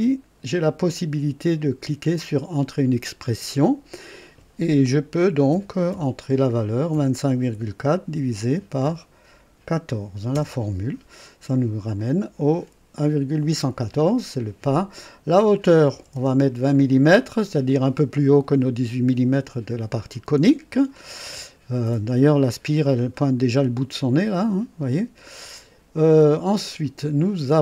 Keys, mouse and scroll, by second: 2.5 click, 5.4 KP_2, 5.8 KP_5, 6.9 KP_Decimal, 7.5 KP_4, 8.1 KP_Divide, 8.5 KP_1, 8.8 KP_4, 10.3 Return, 11.9 click, 15.9 KP_2, 16.1 KP_0, 17.5-18.3 typing, 17.6 click, 24.0 click, 25.5 click.